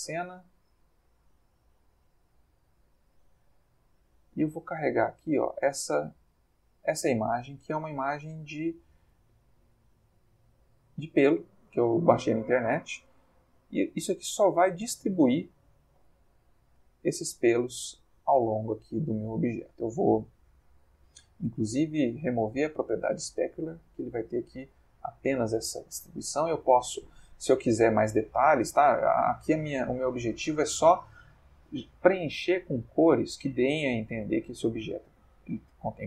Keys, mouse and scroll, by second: 0.5 click, 1.4 click, 2.8 click, 3.8 click, 4.9 click, 6.2 click, 10.8 click, 13.3-14.5 ctrl+middle drag, 14.7-15.3 ctrl+shift+middle drag, 15.5-17.9 ctrl+shift+middle drag, 18.6-19.9 ctrl+middle drag, 22.0-23.7 drag, 23.9-26.5 middle drag, 28.7-30.7 middle drag, 31.8-32.5 middle drag, 33.0-34.8 middle drag.